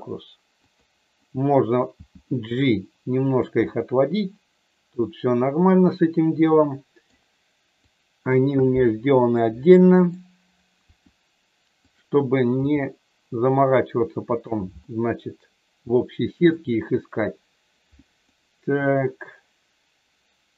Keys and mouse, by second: 0.7 click, 2.0 g, 3.3 click, 3.7-7.0 middle drag, 7.8 click, 9.2 middle click, 10.8 r, 12.5 g, 14.3 click, 14.8-16.5 middle drag, 18.3-20.5 middle drag.